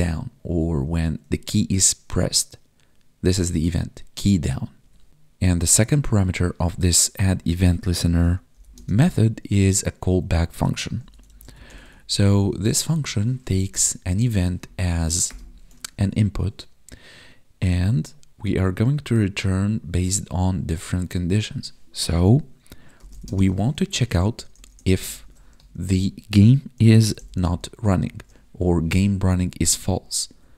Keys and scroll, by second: 4.7 Tab, 7.2 Right, 8.7 space, 13.9 Right, 15.8 ctrl+s, 23.2 space, 29.4 Down, 30.2 Tab.